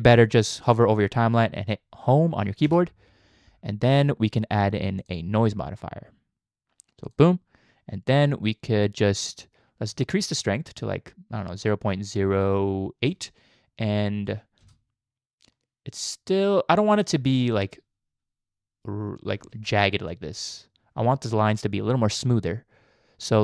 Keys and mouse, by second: 2.7 Home, 5.0-7.2 drag, 10.2-13.1 shift+drag, 14.6 space, 19.4 space, 20.1-20.5 drag.